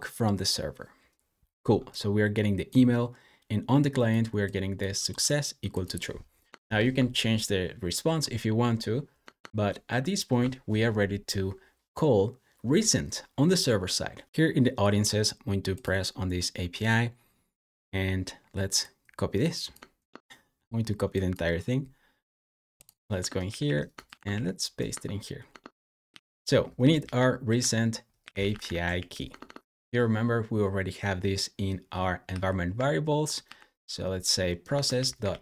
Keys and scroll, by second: 6.6 super+j, 9.7 shift+super+], 14.2 Escape, 23.0 Escape, 23.3 g, 23.9 shift+o, 24.2 super+v, 25.3 Escape, 26.0-29.8 typing, 31.9-33.3 typing, 34.6-35.4 typing.